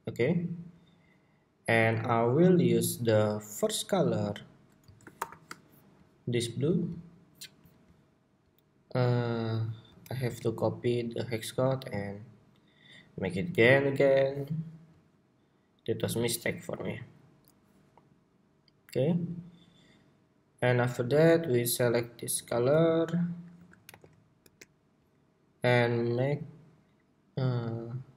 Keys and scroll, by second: 4.9 shift+super+y, 9.8 super+c, 10.0 super+c, 23.3 super+a, 23.6 super+v.